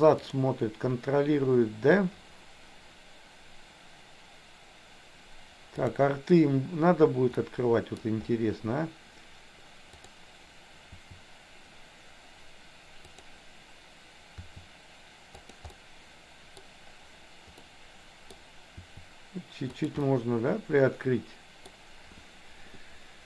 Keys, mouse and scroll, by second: 5.8 click, 7.4 middle click, 10.0 click, 10.9 r, 13.2 click, 14.4 r, 15.8 middle click, 17.7 middle click, 18.8 r, 20.1-21.8 middle drag.